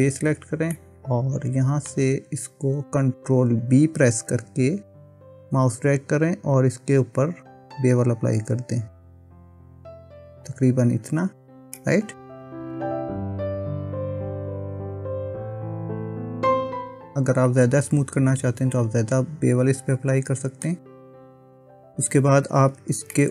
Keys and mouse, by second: 0.8-1.9 middle drag, 4.5 ctrl+b, 11.1 Tab, 11.8-20.7 middle drag, 22.6 Tab, 23.2 middle click.